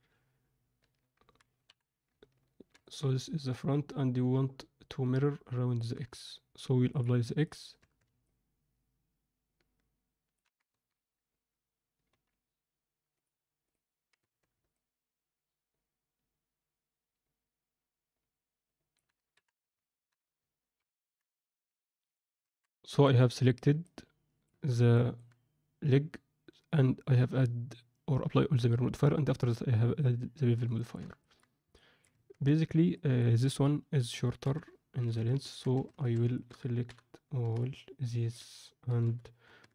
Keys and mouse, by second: 1.6 KP_1, 2.7-5.8 middle drag, 6.9-7.5 drag, 7.7 Tab, 8.2-10.3 alt+middle drag, 10.7 ctrl+z, 12.1 ctrl+z, 13.3 click, 14.1 Tab, 14.7-18.9 alt+middle drag, 19.3 KP_1, 20.7 ctrl+F9, 21.1 ctrl+F10, 22.4 Tab, 22.9 alt+middle click, 23.5 click, 23.8 middle click, 24.9 middle click, 30.7 alt+shift+middle click, 31.1 ctrl+alt+middle click, 31.7 middle click, 32.1 Tab, 32.4 Tab, 32.9 middle click, 34.4 KP_3, 35.0 z, 35.3 ctrl+middle click, 35.7 a, 36.2 alt+a, 36.3 shift+middle click, 36.8 v, 37.3 c, 38.8 g.